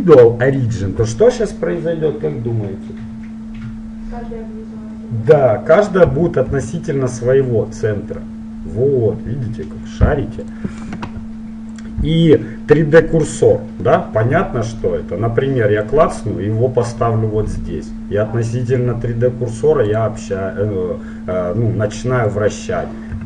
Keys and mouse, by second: 6.6 r, 12.0-13.7 drag, 14.0-16.0 middle drag, 16.0-17.6 drag, 17.6 r, 18.2 middle click, 22.4-23.2 drag.